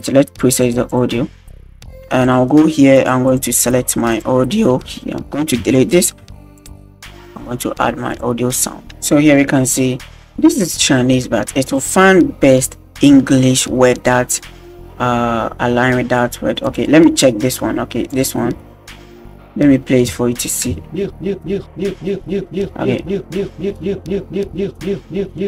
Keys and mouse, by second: 0.5 click, 0.9 click, 2.4 click, 5.6 Delete, 6.6-7.7 drag, 7.9 x, 8.6 click, 18.1 click, 20.7 space.